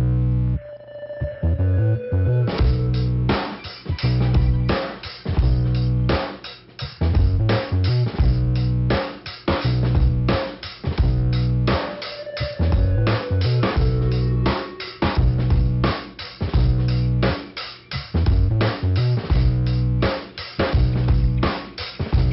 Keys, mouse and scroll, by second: 0.1 click, 1.4 click, 2.8 click, 3.5 click, 3.6 click, 6.1 click, 7.0-7.3 scroll down 1, 7.6 middle click, 11.9 click, 13.0 click, 14.0 click, 15.3 click, 16.0 middle click, 17.4 click, 18.3 scroll up 2, 18.7 middle click.